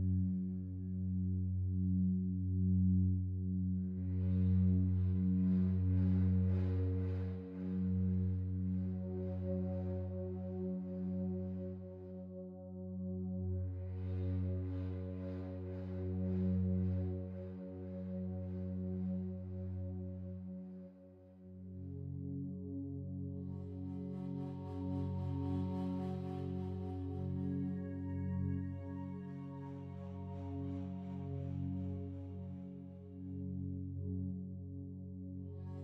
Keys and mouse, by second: 2.2 g, 2.4 g, 4.3 click, 5.0-6.0 alt+drag, 5.6 ctrl+z, 6.3-8.1 alt+drag, 10.1 g, 10.6 x, 12.3 click, 13.2 g, 13.4 y, 15.0-16.1 drag, 16.2 alt+click, 17.6 alt+shift+click, 18.2 1, 18.6 alt+shift+click, 19.4 alt+shift+click, 21.2 click, 22.0 ctrl+alt+click, 22.5 alt+shift+click, 23.1 ctrl+alt+click, 24.2 alt+shift+click, 24.7 ctrl+alt+click, 25.7 typing, 28.7 click, 29.5 click, 30.5 middle click, 30.9-31.3 typing, 33.3 click, 35.0 click.